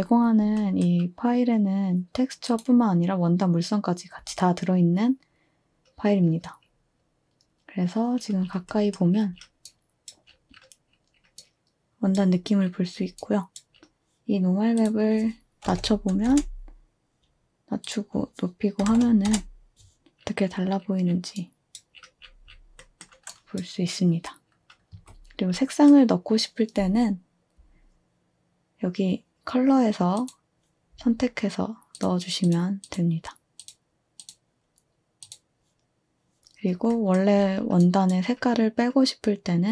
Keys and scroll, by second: 15.4-16.2 typing, 16.3 Return, 18.6-19.3 typing, 22.0 typing, 24.3-25.0 typing.